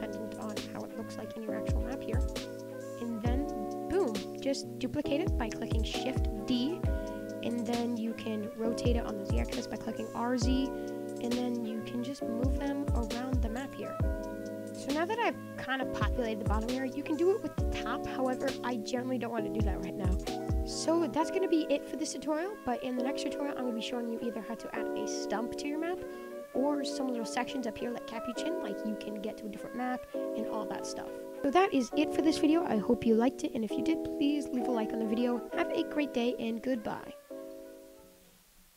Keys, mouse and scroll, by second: 0.5 middle drag, 0.8 scroll down 3, 0.9-1.8 middle drag, 1.8-2.3 scroll down 4, 2.3 scroll up 2, 2.5 click, 2.6-5.0 middle drag, 5.0-5.9 scroll up 3, 5.9-6.5 scroll up 1, 6.5 shift+d, 7.7 click, 8.6 r, 10.4-10.7 middle drag, 10.7-11.4 scroll down 4, 10.8-11.2 middle drag, 11.4-12.4 middle drag, 12.4 click, 14.3 middle drag, 14.6 scroll up 5, 14.9-15.3 middle drag, 15.3-15.6 scroll up 1, 15.6-16.7 middle drag, 16.7-17.1 scroll down 5, 17.1-21.6 middle drag, 21.6 scroll up 5, 21.8-22.3 middle drag, 22.3-22.7 scroll up 2, 22.7-28.0 middle drag, 28.0 click, 28.1 middle drag, 28.4-30.5 scroll down 6, 30.5 click, 30.7 shift+middle click, 31.0-31.4 scroll up 6, 31.4-36.3 shift+middle drag.